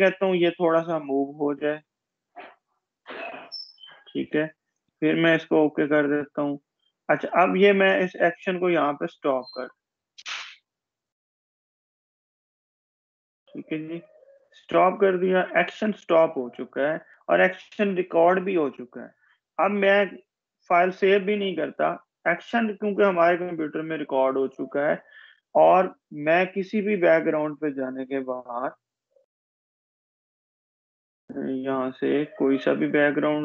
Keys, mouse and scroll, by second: 0.9-1.5 drag, 19.1-21.1 scroll down 1, 22.7 click, 27.2-29.1 scroll up 1, 30.5 click, 33.2 click.